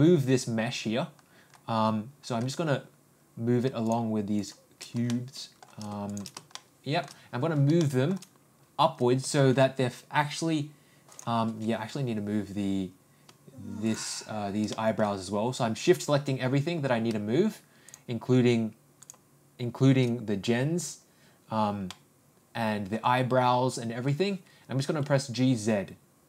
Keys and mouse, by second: 5.1 shift+middle click, 6.5 shift+middle click, 7.8 shift+middle click, 9.2 g, 14.7 ctrl+middle click, 21.9-23.0 middle drag, 24.8 g.